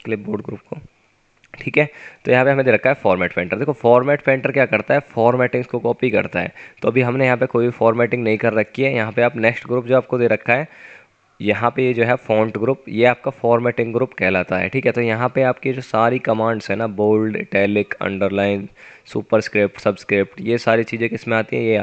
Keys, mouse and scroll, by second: 4.2 scroll up 1, 10.9-12.4 typing.